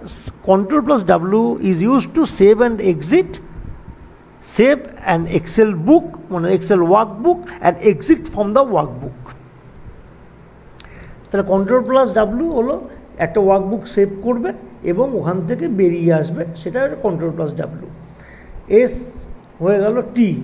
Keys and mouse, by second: 10.8 click, 10.8 typing, 19.0 click.